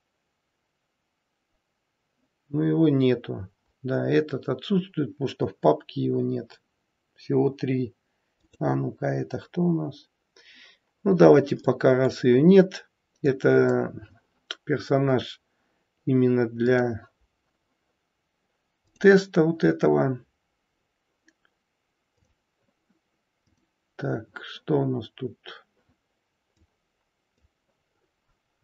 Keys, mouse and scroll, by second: 16.8 click, 16.8-17.7 scroll up 2, 18.8 click, 22.0 click, 23.5 click, 26.5 click, 27.8-28.5 scroll up 2, 28.5 scroll down 3.